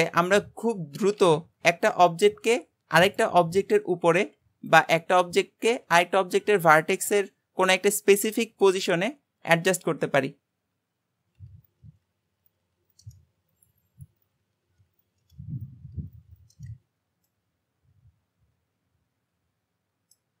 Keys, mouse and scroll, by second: 0.1-1.2 shift+middle drag, 1.2 shift+s, 3.9 g, 5.2-8.4 middle drag, 11.4 Tab, 11.6 click, 12.6 Tab, 13.5-14.2 shift+middle drag, 14.2 click, 14.6 Tab, 15.0 click, 15.8 Tab, 16.1 click, 16.6 shift+s, 17.3-20.4 middle drag.